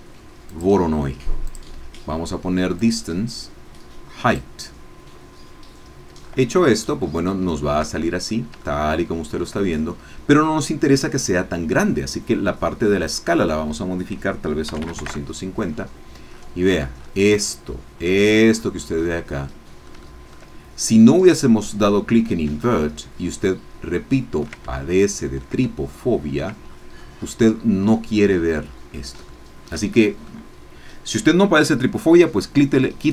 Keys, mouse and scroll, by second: 0.5 click, 1.5 click, 2.8-4.5 drag, 6.2-6.7 scroll up 2, 7.0 scroll down 2, 7.5 shift+middle click, 8.6-9.9 shift+middle drag, 11.8 scroll down 2, 13.0 click, 14.7 KP_2, 14.8 KP_5, 15.0 KP_0, 15.1 KP_Enter, 16.3-17.5 scroll up 6, 18.0-19.2 scroll down 2, 19.2-20.5 middle drag, 22.6-24.6 ctrl+middle drag, 24.7 ctrl+click, 25.7 ctrl+click, 26.7-29.2 ctrl+scroll down 8, 29.3-32.8 shift+drag.